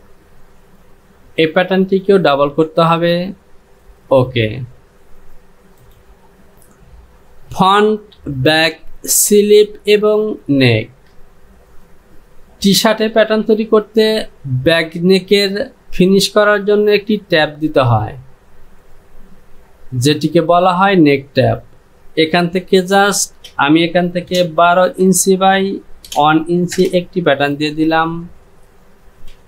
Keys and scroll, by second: 6.6 j, 22.9 Down, 24.7 KP_2, 25.1 Down, 26.1 KP_1, 26.8 Return.